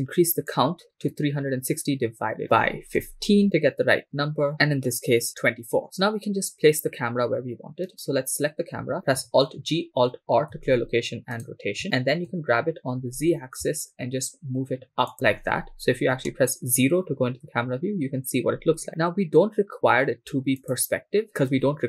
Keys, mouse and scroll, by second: 0.5-4.5 drag, 8.0 right click, 9.4 alt+g, 10.6 r, 11.4 right click, 11.8 alt+r, 12.3 g, 13.1 z, 15.1 ctrl+click, 16.2 KP_0, 20.7-21.8 drag.